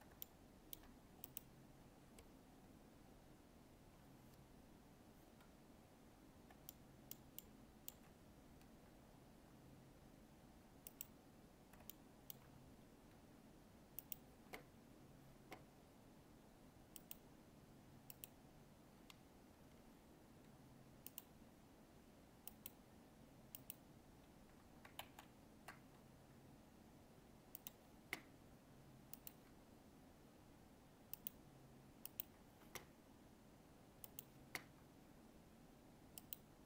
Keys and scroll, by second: 25.0 ctrl+z.